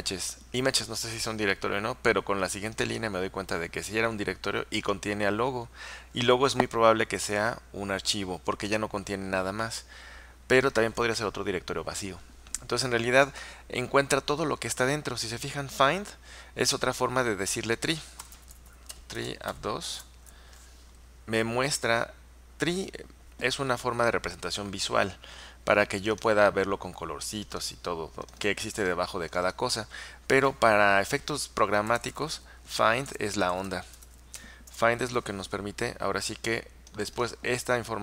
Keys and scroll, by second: 18.0-20.1 typing, 31.8-34.7 typing.